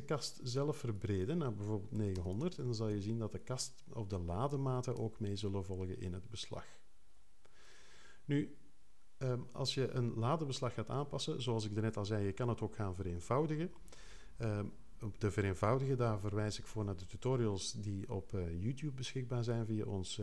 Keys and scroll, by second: 1.7-2.6 typing, 2.9 Return.